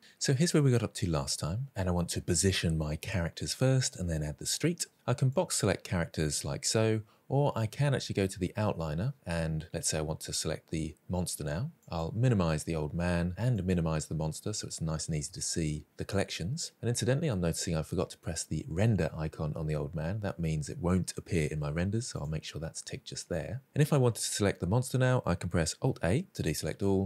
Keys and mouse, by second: 5.3 drag, 11.8 click, 13.5 click, 22.1 click, 25.8 alt+a.